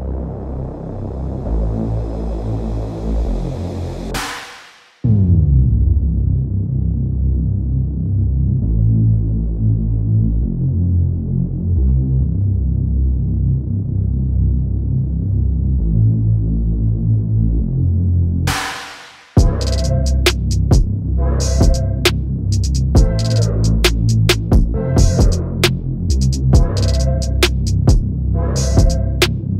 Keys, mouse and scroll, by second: 1.2 scroll down 1, 1.5 s, 1.9 KP_1, 2.1-2.7 scroll up 16, 2.2 shift+middle click, 2.4 shift+middle click, 2.7 shift+middle click, 4.0 alt+click, 4.1 g, 4.5-4.9 scroll down 32, 4.9 shift+middle click, 5.2-13.5 typing, 6.1 shift+middle click, 6.3 scroll up 4, 6.9 scroll up 1, 6.9 shift+middle click, 7.7 scroll down 16, 8.1 shift+middle click, 8.2 scroll up 1, 8.3 Tab, 8.5 middle click, 9.0 scroll up 1, 9.1 Tab, 9.6 click, 10.2 click, 11.3 click, 11.9 scroll down 2, 12.2 middle click, 12.5-12.9 scroll up 2, 14.5 g, 15.0 shift+middle click, 15.0 a, 15.5 s, 16.5-25.5 typing, 19.1 scroll down 2, 19.5 scroll up 2, 19.6 shift+middle click, 19.8 click, 21.3 scroll down 4, 21.3 middle drag, 21.8 middle drag, 22.1 middle drag, 22.3 middle click, 22.6-23.1 middle drag, 23.3 middle click, 23.6 middle click, 24.2 middle click, 24.7 middle click, 25.0 middle click, 25.6 click, 26.3 ctrl+e, 26.5 alt+click, 26.7 alt+shift+click, 26.8 shift+click, 27.0 shift+click, 27.3 ctrl+e, 27.3 shift+middle click, 27.6 alt+click, 27.6 scroll down 2, 27.7 shift+middle click, 27.9 alt+shift+click, 28.2 ctrl+e, 28.3 click, 28.5 shift+middle click, 28.7 shift+click, 28.8 shift+click, 29.0 ctrl+e, 29.1 scroll down 2, 29.2 shift+middle click, 29.4 KP_3.